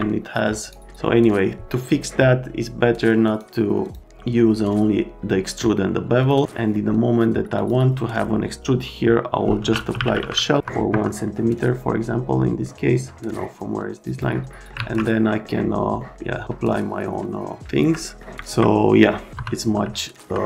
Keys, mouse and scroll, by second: 0.6 right click, 3.2 right click, 3.8 click, 6.2 click, 7.5 click, 9.6-10.5 typing, 10.6 F3, 10.9 F3, 11.2 right click, 12.6 right click, 14.1 click, 14.5 right click, 14.8 alt+1, 15.2 right click, 16.0 right click, 17.6 alt+right click, 18.0 right click, 18.4 ctrl+middle click, 19.2 right click, 19.8 alt+right click.